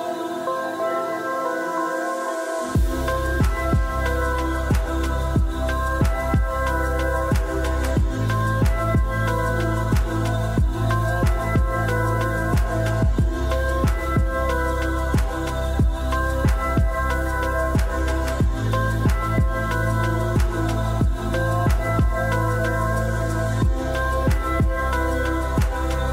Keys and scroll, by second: 21.9 g.